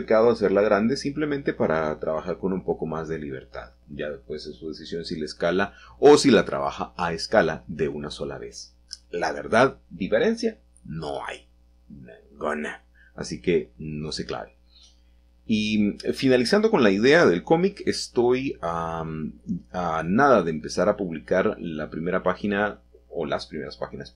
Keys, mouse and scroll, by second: 1.5-2.6 drag, 2.9 typing, 7.5-8.2 drag, 8.1-8.5 scroll up 1, 8.8-11.2 shift+middle drag, 11.8 s, 14.7 drag, 15.7 g, 16.2 x, 17.7 click, 18.7 g, 19.7 y.